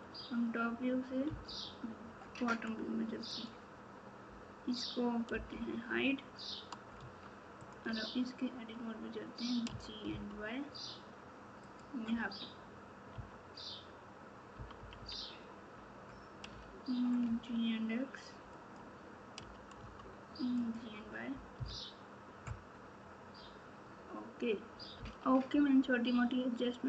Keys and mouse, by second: 1.2 KP_9, 5.3 h, 7.0 Tab, 9.6 g, 13.1 KP_3, 14.5 KP_6, 16.4 g, 21.5 KP_4, 24.9 KP_Multiply.